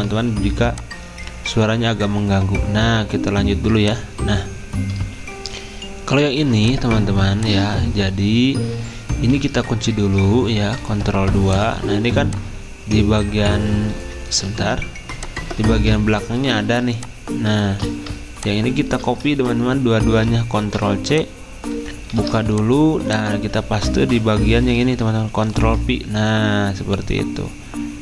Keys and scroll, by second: 10.8 ctrl+2, 13.0 ctrl+z, 14.4 ctrl+2, 20.6 ctrl+c, 22.1 ctrl+alt+2, 24.0 ctrl+z, 25.4 ctrl+f.